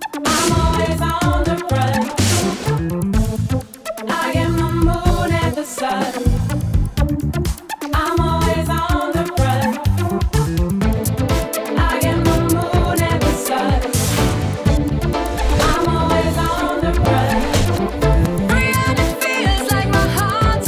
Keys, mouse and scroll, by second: 1.3 click, 3.0 alt+click, 4.5 alt+click, 5.3 alt+click, 6.4 alt+click, 7.2 alt+click, 8.4 alt+click, 9.4 click, 10.8 click, 11.9 click, 12.4 click, 13.5 click, 14.5 click, 15.3 click, 16.7 click, 19.6-20.6 typing.